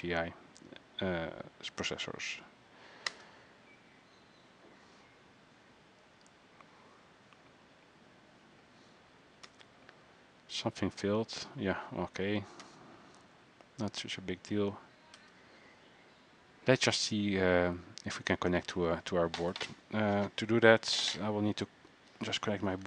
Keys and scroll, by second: 22.1 Escape.